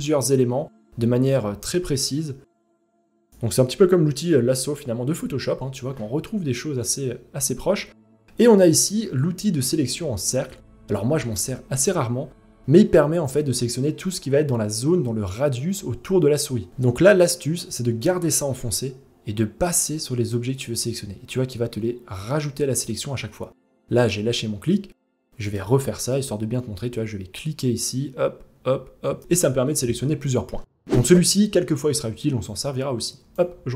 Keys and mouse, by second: 0.9-2.3 drag, 3.0-4.7 drag, 7.2-10.3 drag, 16.5 click, 17.7-22.4 drag, 25.1 click, 25.8-28.8 drag, 30.5 click, 32.2-33.0 drag.